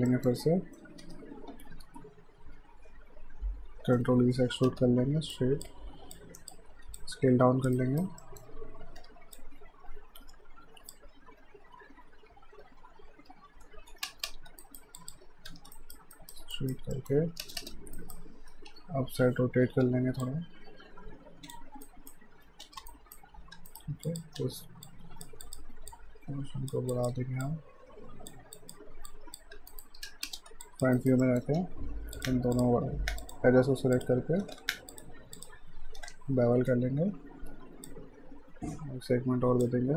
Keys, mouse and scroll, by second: 0.1 alt+middle click, 1.0 w, 3.8 e, 5.3 click, 6.7 r, 7.0 click, 7.7 alt+right click, 8.2 alt+middle click, 9.0 w, 9.4 click, 12.6 ctrl+b, 13.8 ctrl+z, 14.1 space, 14.6 alt+right click, 15.0 alt+click, 15.5 w, 15.8 alt+right click, 16.9 alt+middle click, 17.5 space, 18.0 alt+right click, 18.7 e, 19.8-20.7 typing, 20.2 click, 21.7-24.4 typing, 21.9 alt+right click, 22.9 alt+right click, 23.7 right click, 24.1 click, 24.9 click, 29.5 q, 29.7 right click, 30.0 space, 30.7 alt+click, 31.0 alt+right click, 31.2 alt+middle click, 31.6 q, 32.2 click, 32.6 shift+click, 33.2 shift+click, 34.6 ctrl+z, 34.9 shift+click, 36.6 ctrl+b, 37.9 click.